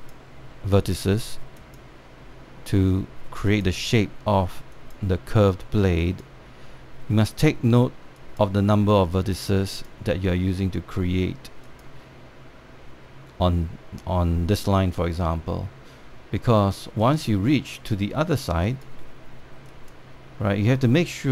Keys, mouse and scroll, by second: 17.7 click.